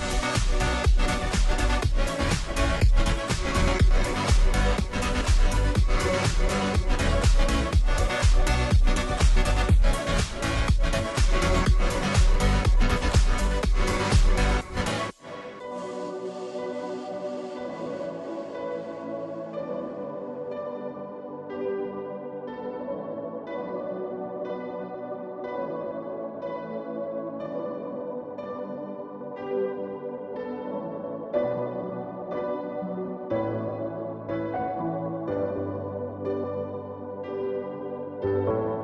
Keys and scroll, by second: 2.0 ctrl+g, 5.4-7.5 typing, 10.2 typing, 30.3 ], 38.2 typing.